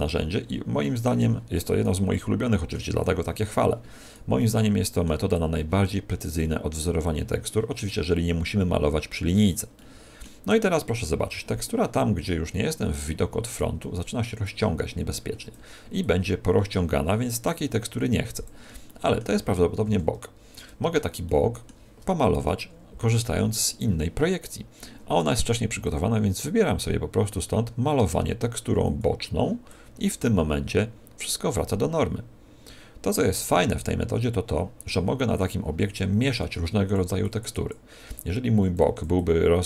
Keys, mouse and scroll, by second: 2.0 middle click, 2.9 click, 5.3 click, 6.4 middle click, 7.0 click, 9.7 middle click, 10.4 click, 13.7 middle click, 14.4 click, 15.9 click, 18.8 middle click, 19.8 KP_1, 21.2 shift+middle click, 22.3 KP_3, 25.7 click, 29.6 click, 36.7 click, 37.2 click.